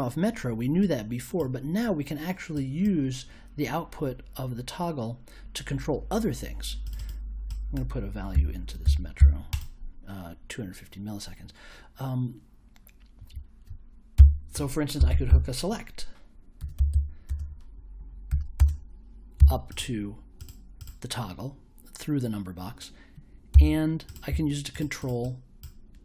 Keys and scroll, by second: 8.3 2, 8.8 5, 9.2 0, 14.1-19.3 typing, 23.5 b.